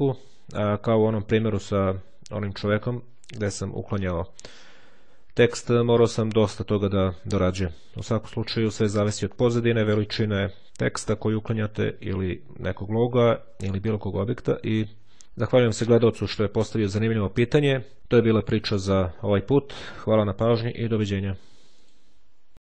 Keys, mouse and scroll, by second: 5.9-9.6 drag.